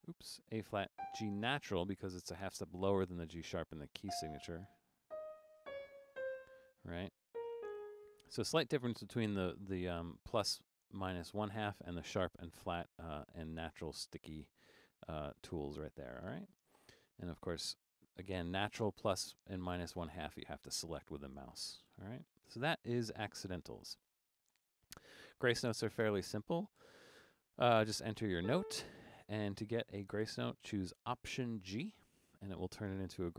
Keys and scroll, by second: 0.0-1.0 typing, 4.1-6.2 typing, 7.3-7.6 typing, 14.4-16.3 typing, 26.8 4, 28.2-28.9 typing, 31.8 alt+g.